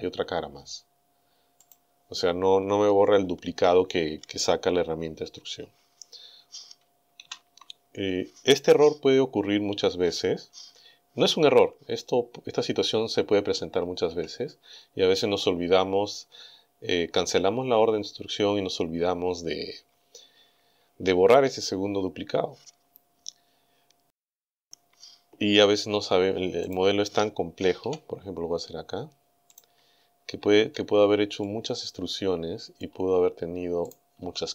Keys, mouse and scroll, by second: 1.7 click, 7.2 ctrl+z, 13.6 a, 26.7 right click, 27.8 e, 29.5 right click, 31.3 scroll up 2, 31.4-33.0 middle drag, 33.9 right click, 34.2 e.